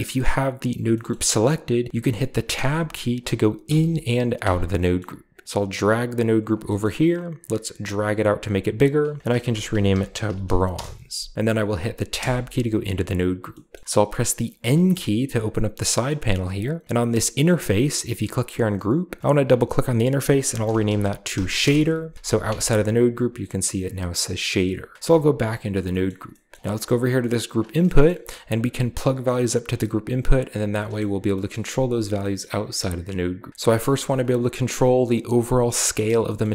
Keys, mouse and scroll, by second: 1.0 middle click, 1.1-1.9 scroll up 1, 2.4 Tab, 2.9-4.3 scroll up 1, 3.5 Tab, 4.3 Tab, 4.9-5.4 middle drag, 5.4-6.5 drag, 6.5-7.5 scroll up 1, 7.0 click, 7.7-9.4 drag, 9.3-10.3 typing, 10.6 Return, 11.5-12.0 drag, 12.0 BackSpace, 12.6-13.8 scroll down 1, 13.4 middle click, 14.2-15.5 middle drag, 14.5 n, 18.1 click, 19.2 click, 19.3 click, 20.4-22.8 typing, 21.5 Return, 22.3-22.8 middle drag, 22.8-24.1 scroll up 2, 24.1 click, 24.9 Tab, 25.3-25.9 scroll down 2, 25.9-27.4 scroll up 1, 26.0 middle click, 26.4 middle click, 27.4 drag, 27.6-28.4 scroll down 1, 28.2 g, 28.5 click, 30.9 middle click, 31.4 middle click, 32.3-34.7 middle drag, 33.5 Tab, 36.3 middle click, 36.4-36.5 scroll up 1.